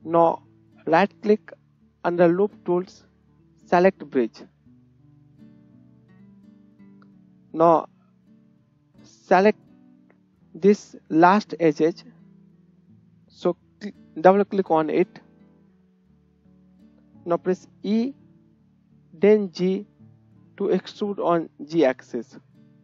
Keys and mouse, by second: 0.1-5.5 right drag, 4.9 KP_1, 5.5-6.8 drag, 6.8 middle click, 6.8 right click, 6.9-9.6 drag, 9.6 right click, 10.0 KP_1, 11.9 click, 15.6 shift+click, 17.9 e.